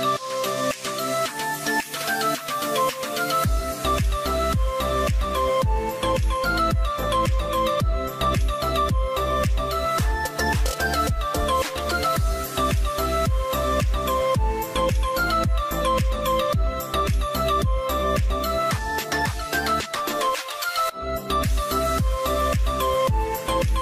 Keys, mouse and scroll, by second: 22.6 double click.